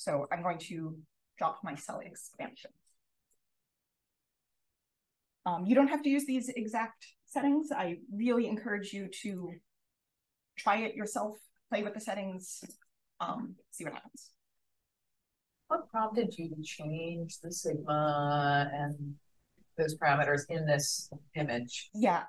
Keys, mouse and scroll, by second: 0.2 2, 9.2 click.